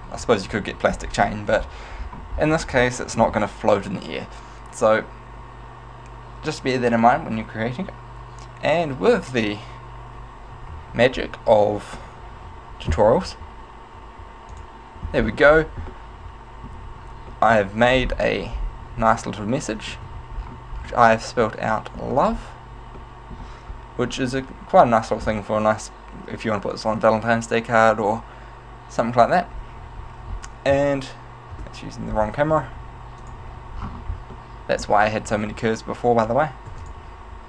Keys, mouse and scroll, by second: 0.3 middle click, 1.1-2.8 scroll down 11, 2.9 middle click, 10.7 Tab, 11.6 middle click, 14.7 click, 15.4-16.1 scroll down 4, 16.1 shift+middle click, 17.5 middle click, 18.1-19.3 scroll up 6, 19.5 middle click, 20.1 z, 20.5-21.2 scroll down 4, 21.6 middle click, 22.5-22.9 scroll down 1, 23.1 shift+middle click, 30.9 KP_0, 31.7 KP_0, 33.3 click, 33.9-34.5 scroll down 2, 34.5 shift+middle click, 35.4 right click, 36.2 right click, 36.7 x.